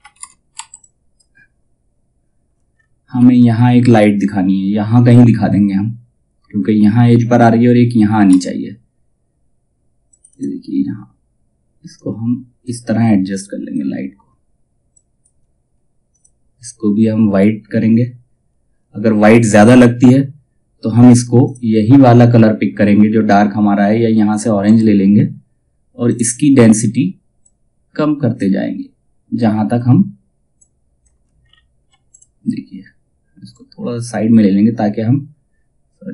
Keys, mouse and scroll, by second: 0.1 F2, 0.3-2.2 drag, 2.2-2.6 ctrl+scroll down 1, 7.8 space, 9.6-14.4 drag, 21.0 click, 24.2-30.1 drag, 30.1 click, 30.9-31.5 ctrl+scroll down 1, 31.6-36.1 drag.